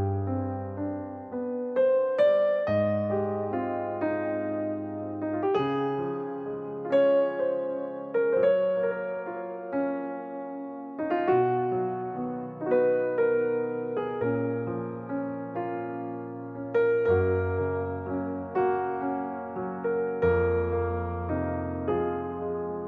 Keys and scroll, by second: 0.8 Delete, 3.4 Delete, 15.9-17.2 typing, 19.0 typing, 20.5 m, 21.6 typing.